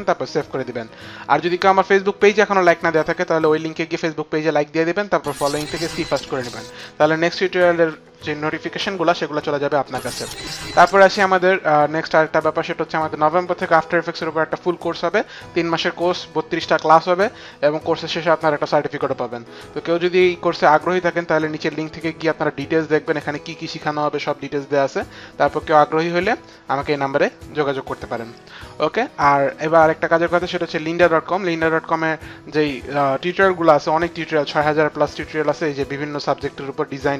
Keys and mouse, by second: 2.0 click, 11.1 click, 26.5 click, 27.4 click, 29.6 click.